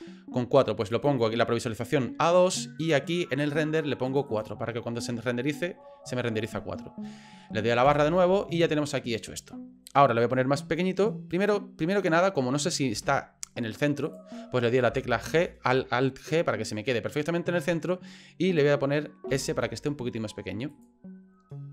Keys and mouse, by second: 0.8 click, 1.1 click, 4.3 click, 5.4 middle click, 7.8 KP_Divide, 12.9 g, 15.3 alt+g, 16.7 middle click, 17.5 middle click, 19.3 s.